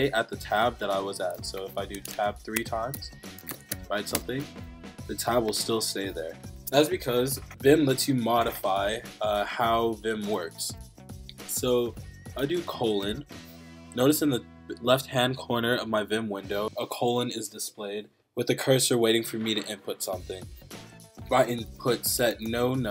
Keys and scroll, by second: 1.5 BackSpace, 2.0 Tab, 2.1 Tab, 2.6 Tab, 3.1-4.2 typing, 6.6 Escape, 21.7-22.9 typing.